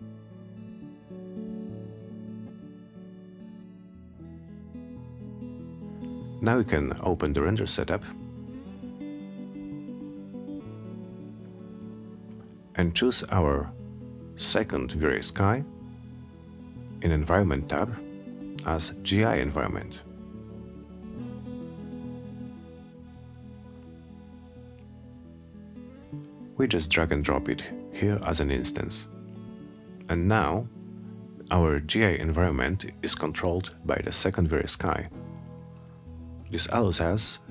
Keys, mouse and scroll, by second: 0.4 click, 1.3-1.6 scroll down 2, 2.0-2.9 middle drag, 4.0 F10, 7.8 click, 11.5 click, 13.1 middle click, 16.1 click, 18.0-20.2 drag, 22.0-24.5 drag, 26.6 click.